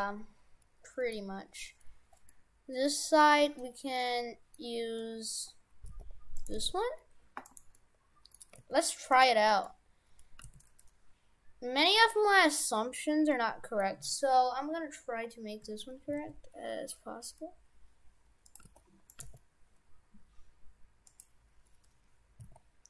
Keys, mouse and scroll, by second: 0.0 middle click, 2.3 middle click, 3.3 middle click, 4.1 middle click, 5.0 middle click, 5.9 g, 6.5 g, 7.8 middle click, 8.5 g, 9.5 middle click, 9.7-10.2 scroll down 5, 10.4 g, 12.2-13.1 scroll up 7, 13.3 middle click, 14.4-15.0 scroll down 2, 16.2 s, 18.7 g, 19.2 g, 22.2 g, 22.5 s.